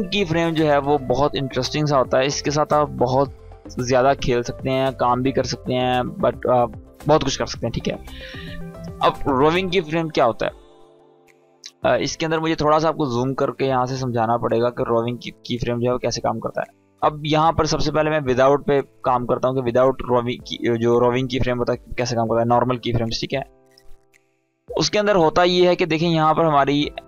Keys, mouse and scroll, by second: 8.8-10.0 drag, 11.7 scroll up 1, 12.3 space, 12.4 click, 12.8-14.0 space, 14.8-15.7 click, 15.2 space, 17.9 click, 24.2 click.